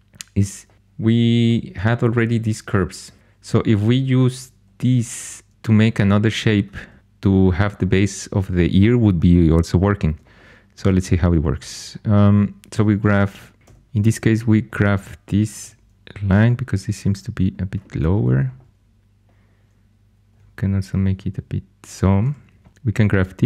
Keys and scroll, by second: 4.9 3, 13.6 1, 15.5 g, 20.2 g, 22.2 2.